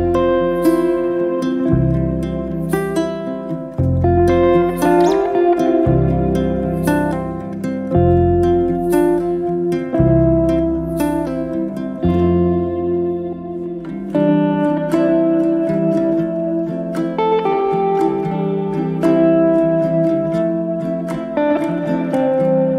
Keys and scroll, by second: 2.6 m, 6.7 space, 14.5 m, 18.0 space.